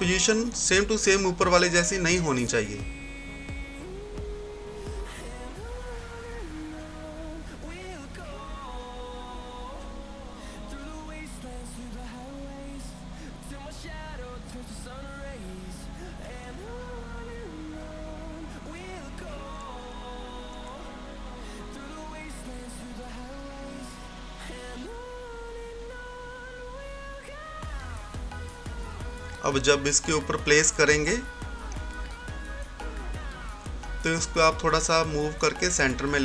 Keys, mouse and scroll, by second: 2.6-11.0 drag, 2.6 typing, 10.8-11.6 typing, 11.6 click, 12.4-13.0 scroll down 1, 13.0 scroll up 1, 14.6 click, 15.2 scroll down 1, 15.3 typing, 16.6-23.9 drag, 23.9 right click, 24.7-31.3 drag, 25.9 typing, 31.3 scroll up 1, 33.6 typing, 34.8 Right, 34.8 typing.